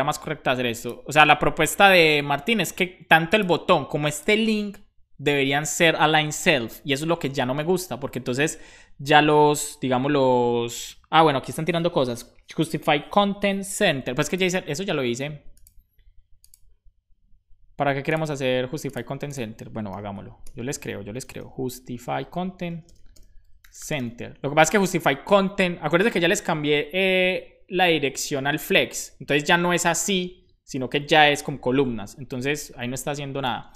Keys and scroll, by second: 19.8 ,, 20.3 Return, 21.2-24.1 typing, 22.1 Return, 24.3 super+s, 24.5 Right, 32.4 super+s, 33.3 shift+super+Left, 33.6 BackSpace.